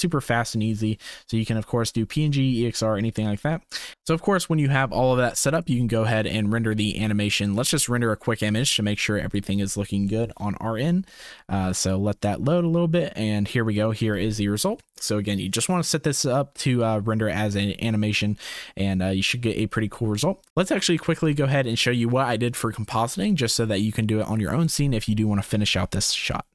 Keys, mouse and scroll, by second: 3.9 ctrl+s, 5.6-7.7 drag.